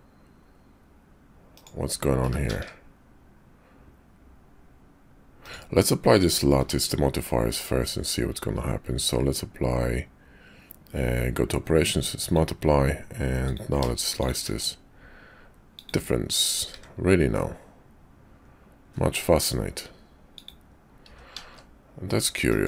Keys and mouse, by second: 2.2 g, 6.5 q, 13.5 click, 14.2 shift+click, 14.5 q, 16.7 `, 17.3-19.5 middle drag, 20.9 s.